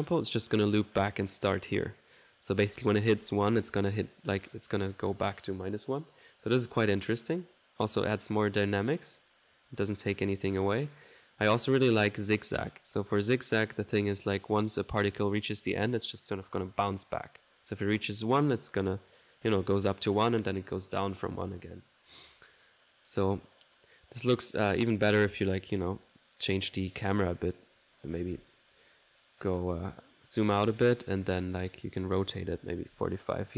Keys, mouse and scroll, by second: 7.1-8.3 drag, 9.2 click, 12.1 click, 12.8 click, 13.3 click, 13.5 click, 13.9 click, 14.2 click, 14.7-20.2 drag, 22.6 middle click, 23.0 click, 23.3 right click, 24.2 click, 24.8 middle click, 25.5 click, 26.7 click, 27.1 click, 27.8-28.8 drag, 28.3 4, 29.8 click, 31.4 click, 32.2 click.